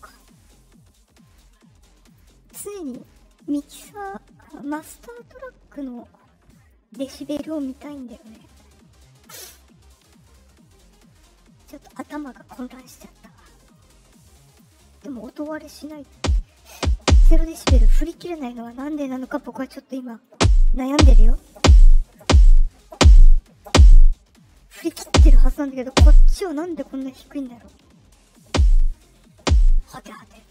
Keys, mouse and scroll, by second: 0.0 click, 1.2 click, 2.0 click, 2.8 click, 11.9 click, 13.7 click, 15.1 click, 15.7 click, 18.5 click, 19.9 click, 30.4 click.